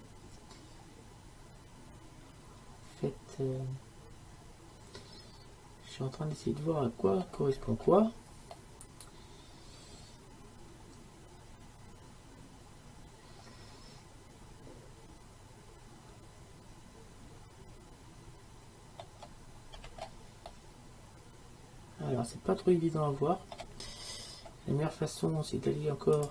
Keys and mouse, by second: 8.6-21.6 middle drag, 21.8 middle click, 22.8 middle click, 23.0 middle click, 23.5-26.3 middle drag.